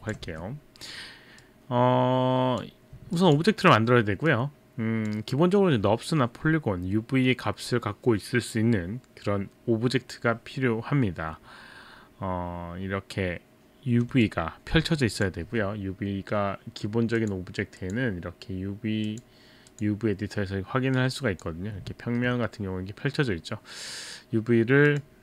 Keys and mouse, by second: 0.0 alt+click, 0.3 e, 1.4 click, 3.1 alt+click, 4.3 click, 14.3 alt+click, 15.5 q, 17.2 click, 17.8 click, 19.1 click, 19.7 click, 21.1 click, 22.1 alt+middle click, 22.2 alt+middle click, 24.9 click.